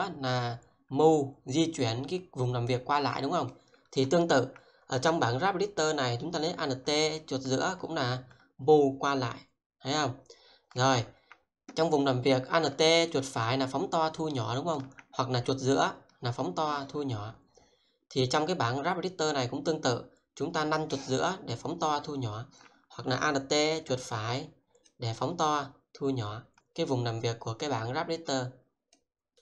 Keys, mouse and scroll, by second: 7.2 alt+middle click, 13.1 alt+right click, 15.4 scroll down 1, 16.8 scroll up 1, 20.2-20.7 scroll down 1, 21.2-21.7 scroll down 1, 21.7-22.6 scroll up 1, 23.7 alt+right click, 29.3 middle click.